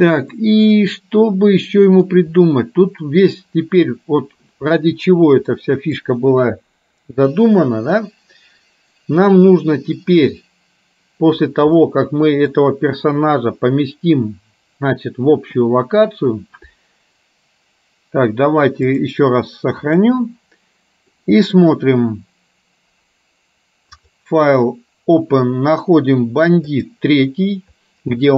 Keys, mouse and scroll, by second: 0.4-2.1 middle drag, 5.6 middle click, 11.9 middle click, 19.0-20.3 drag, 21.3 middle click, 24.0-28.3 drag.